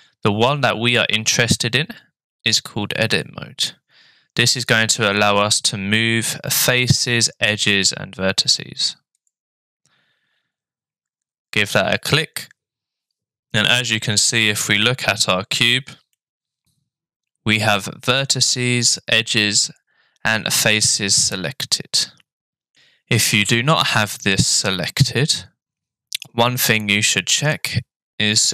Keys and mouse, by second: 16.2-22.7 middle drag, 23.2 middle click.